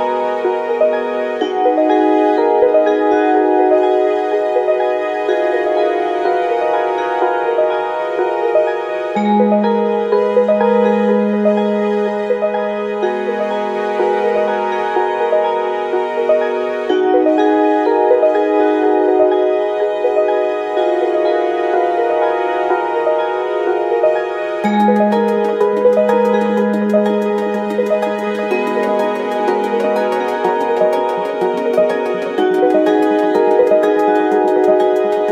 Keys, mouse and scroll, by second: 0.8 click, 1.7 click, 2.8 KP_5, 2.8 KP_0, 3.8 KP_Enter, 5.3 click, 6.3 click, 6.7 click, 7.7 KP_2, 7.9 KP_0, 8.1 KP_Enter, 9.4 click, 11.0 ctrl+d, 12.5 click, 13.9 ctrl+d, 15.4-17.0 shift+drag, 17.7 shift+click, 19.3 click, 19.5 scroll up 2, 20.3 ctrl+d, 21.4 shift+click, 23.8 ctrl+KP_Multiply, 26.0 click, 28.2 click, 29.4 click, 30.2 click, 31.4 click, 32.3 ctrl+a, 33.4 click, 35.2 click.